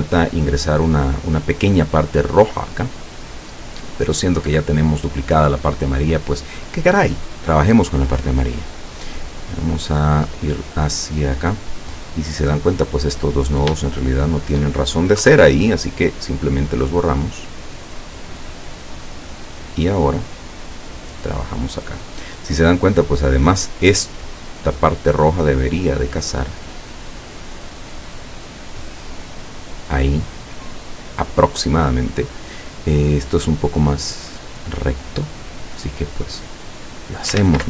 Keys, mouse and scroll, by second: 8.3 click, 9.4 click, 13.1 click, 14.1 shift+click, 15.3 Delete, 16.9-19.6 drag, 20.2-22.4 drag, 26.8-28.1 drag, 28.9-31.2 drag, 33.3 click, 35.9-37.5 drag, 37.4 ctrl+z.